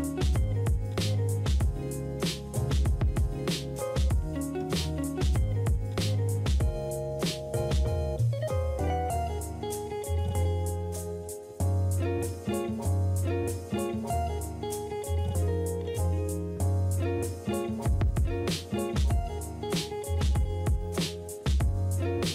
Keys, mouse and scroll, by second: 4.9 ctrl+d, 6.5 typing.